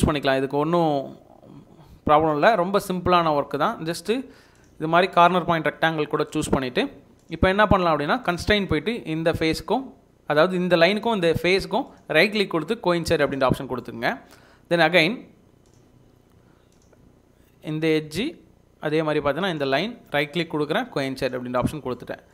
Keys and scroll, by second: 6.6 Escape, 6.9 Escape, 7.1 Escape.